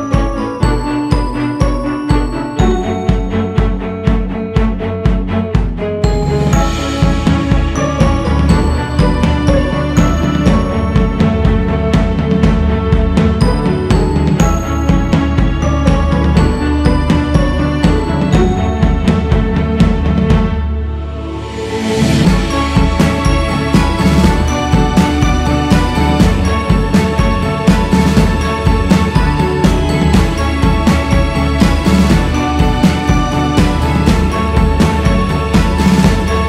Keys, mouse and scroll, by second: 6.4 shift+c, 7.8-9.0 drag, 9.0 ctrl+z, 9.5-10.9 scroll up 1, 10.9 g, 11.1 f, 13.7 shift+s, 14.4-16.7 drag, 16.7 shift+c, 17.5 f, 19.7-28.7 drag, 28.7 scroll down 4, 29.6 click, 30.7-32.5 scroll up 3, 32.5-34.2 drag, 34.2-35.5 scroll down 5, 35.7-36.1 scroll up 2, 36.1-36.4 drag.